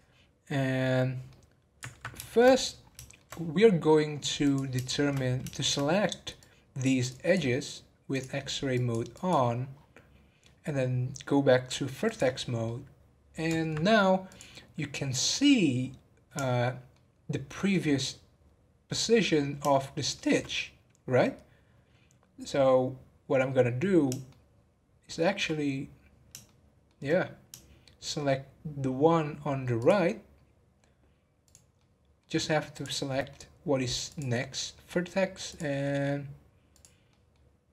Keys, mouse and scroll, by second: 1.3-2.5 middle drag, 2.5-3.0 scroll up 2, 3.0-4.4 shift+middle drag, 4.4 click, 4.9 shift+middle click, 5.2-6.4 scroll up 5, 5.5 shift+middle click, 6.4 click, 7.1 click, 8.1 click, 9.1 click, 9.5-12.0 scroll down 9, 12.0 click, 12.4 scroll down 4, 12.6-14.2 middle drag, 14.2 click, 14.7-15.1 scroll up 5, 16.4-19.4 shift+middle drag, 19.7-22.2 shift+middle drag, 22.2 scroll down 1, 24.3-29.5 shift+middle drag, 29.8 shift+click, 31.4 shift+click, 31.7 shift+middle click, 32.7 shift+click, 33.1-34.1 shift+middle drag, 34.1 shift+click, 34.5 shift+middle click, 35.4 shift+click, 35.8 shift+middle click, 36.7 shift+click, 37.1 shift+middle click.